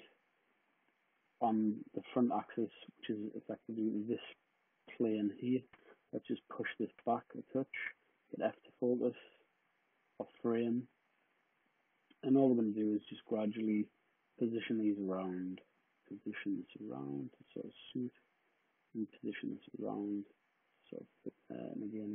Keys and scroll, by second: 7.8 f, 21.9 d.